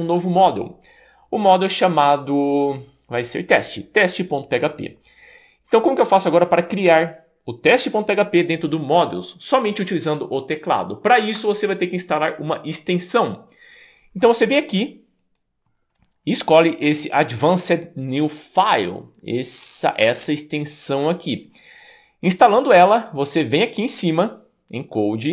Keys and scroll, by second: 11.2 Escape.